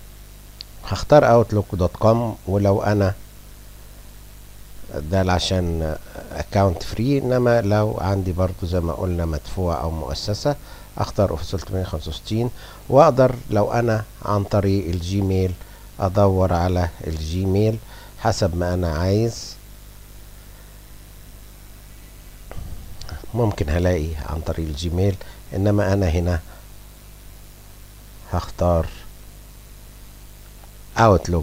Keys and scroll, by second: 13.6 BackSpace, 13.9 BackSpace, 14.2 BackSpace, 14.7 BackSpace, 17.3 shift+g, 21.1 a, 25.8 BackSpace, 26.0 BackSpace, 26.4 BackSpace, 28.4 i, 29.0 o, 30.1 o.